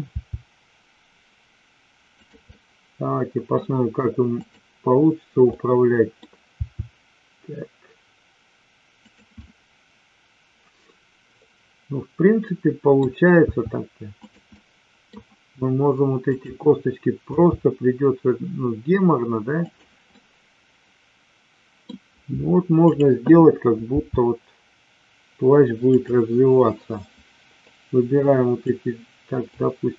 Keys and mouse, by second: 0.2 r, 2.2 click, 2.5-3.6 middle drag, 4.3-5.3 drag, 5.5-6.1 middle drag, 6.6 r, 9.3-12.8 middle drag, 13.3 r, 14.5-15.0 middle drag, 16.2-17.2 drag, 17.3 g, 20.1-21.8 middle drag, 22.7-23.7 drag, 23.8 r, 26.0 click, 27.7-28.7 drag, 29.6-29.9 drag.